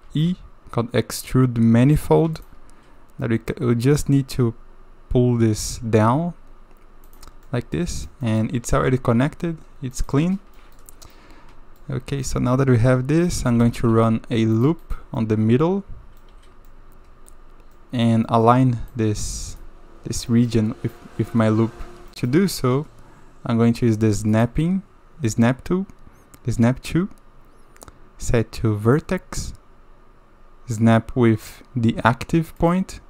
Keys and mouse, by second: 0.1 alt+e, 7.5-8.1 drag, 8.2 click, 8.7 g, 10.6 drag, 11.1 click, 12.2 middle click, 12.8 click, 13.5 a, 13.6 a, 13.9 ctrl+r, 15.2-16.2 drag, 16.3 1, 16.7-17.3 drag, 17.8-18.1 drag, 18.3 click, 18.9-19.6 drag, 20.3 drag, 22.1 shift+drag, 24.3-33.0 drag.